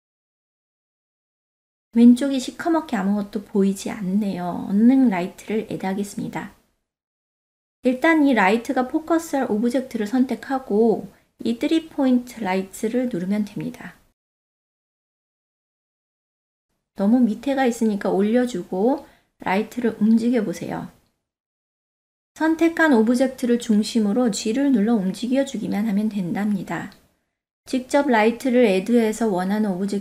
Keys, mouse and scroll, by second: 1.0 middle click, 2.1 click, 6.7 ctrl+z, 6.7 click, 11.2 shift+a, 14.1 click, 15.1 shift+click, 15.9 shift+click, 16.8-19.2 drag, 22.1-22.9 shift+middle drag, 23.5-24.0 drag, 24.4 ctrl+middle drag, 25.2-26.2 shift+middle drag, 26.4-27.0 ctrl+middle drag, 27.2 click, 27.7 click, 29.4 g, 29.5 g.